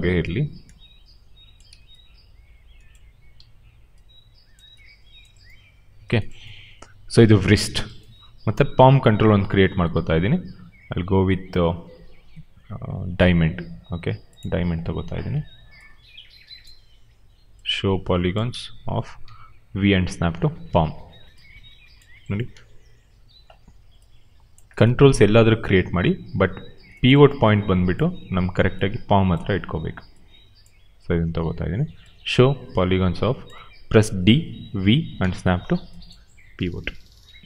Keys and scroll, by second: 3.3 r, 15.3 r, 18.3 w, 19.1 v, 22.5 r, 23.4 w, 24.8 r, 29.6 w, 34.1-36.3 typing.